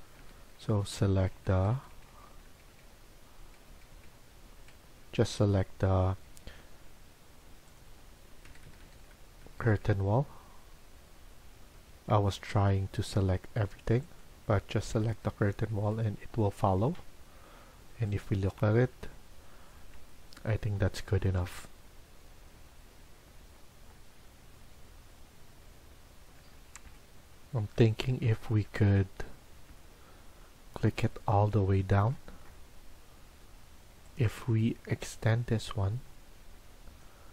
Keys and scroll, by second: 0.1 Right, 0.3 Right, 0.5 Right, 0.7 Right, 0.9 Right, 1.1 Right, 1.3 Right, 1.5 Right, 1.7 Right, 1.9 Right, 2.0 Right, 2.2 Right, 2.4 Right, 2.6 Right, 3.4 Right, 3.6 Right, 3.9 Right, 4.5 Right, 6.2 Escape, 6.5 Escape, 8.3 Right, 8.5 Right, 8.7 Right, 8.9 Right, 9.3 Right, 9.7 Right, 11.5 Escape, 11.9 Escape, 14.9 Right, 15.0 Right, 15.7 Right, 16.4 Escape, 16.7 Escape.